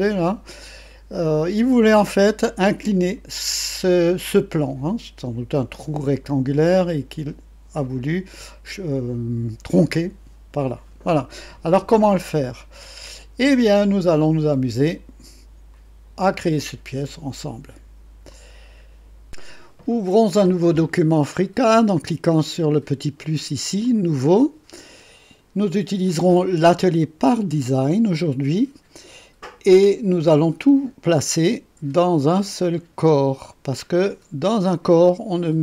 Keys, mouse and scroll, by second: 12.8 click, 13.6-14.5 drag, 15.7 click, 17.0 click, 18.3 click, 23.8 click, 33.1 click.